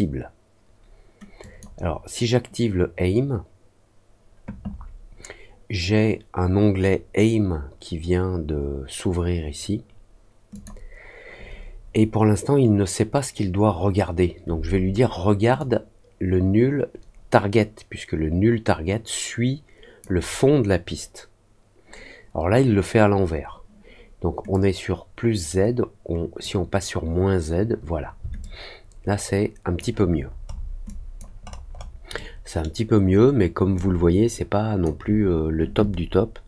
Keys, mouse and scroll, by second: 1.3 click, 10.4 click, 15.5-19.9 drag, 28.3-29.7 alt+drag, 30.1 alt+middle click, 30.4 alt+scroll down 1, 30.8 alt+click, 31.4-31.9 alt+scroll up 2, 32.1 alt+middle click, 33.0-33.4 alt+scroll up 2, 33.7-34.8 alt+drag.